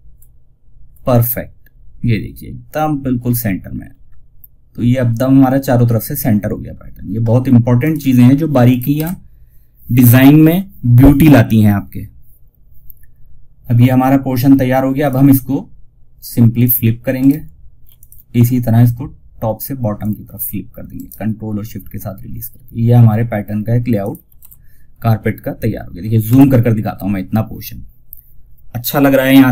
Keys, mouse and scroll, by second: 2.9 scroll down 1, 7.1 click, 8.2 shift+F2, 14.3 click, 16.4 ctrl+right click, 17.3 click, 20.3 ctrl+right click, 23.3 click, 23.7 shift+F2, 25.6 F9.